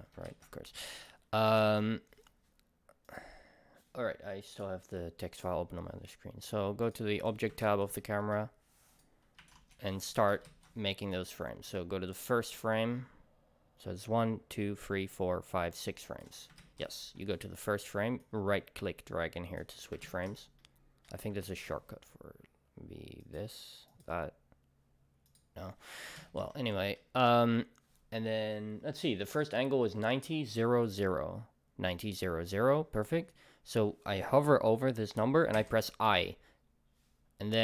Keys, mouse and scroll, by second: 0.0 click, 0.3 ctrl+s, 0.6-1.0 middle drag, 1.0 click, 8.2-9.5 middle drag, 9.5-11.1 drag, 9.7 Return, 10.5 ctrl+s, 11.1-15.6 right drag, 16.6 ctrl+s, 17.9-20.6 right drag, 20.0 ctrl+s, 20.6-22.0 middle drag, 21.5 ctrl+s, 22.1-23.2 middle drag, 24.0-25.7 drag, 26.2 ctrl+s, 26.7-35.6 middle drag.